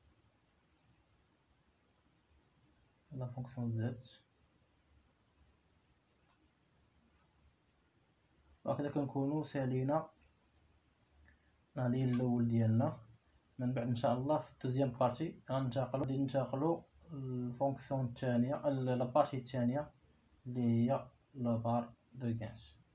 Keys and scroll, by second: 12.8 Escape, 15.4 Escape, 17.1 Escape.